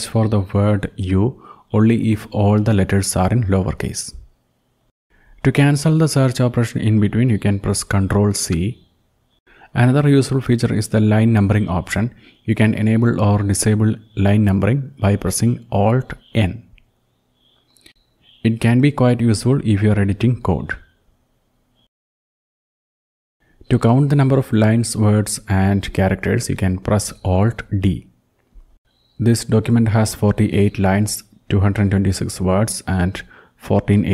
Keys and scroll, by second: 7.2 ctrl+c, 10.7 alt+n, 12.7 Down, 13.2 Down, 13.4-13.9 Down, 14.2 Down, 14.5 Down, 14.6-15.3 Down, 15.7-16.4 Down, 16.5 Down, 16.8 Down, 17.0 Down, 17.2 Down, 17.4 Down, 17.9 Down, 22.1 alt+n, 22.6 alt+n, 22.9 alt+n, 23.2 alt+n, 25.0 alt+d, 33.0 alt+d.